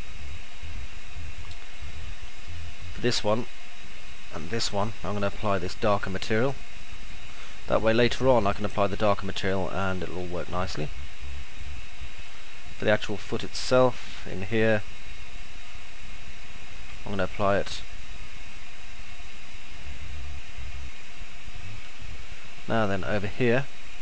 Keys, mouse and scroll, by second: 7.6-8.9 alt+middle drag, 10.4-12.6 alt+middle drag, 15.4 ctrl+click, 19.6 alt+middle click, 21.1-22.1 middle drag, 22.9 middle click.